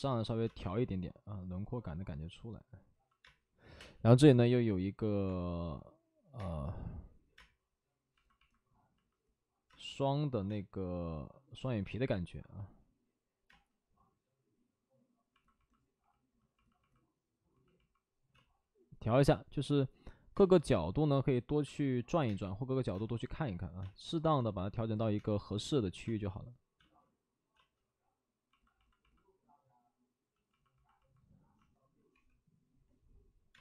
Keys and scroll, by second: 0.4 space, 3.1 space, 3.5 5, 3.7 space, 5.2 3, 6.3 space, 9.6 space, 10.4 space, 13.4 space, 18.2 space, 20.3 space, 21.6 space, 22.2 space, 22.8 space, 32.0 space, 32.0 5, 33.5 space.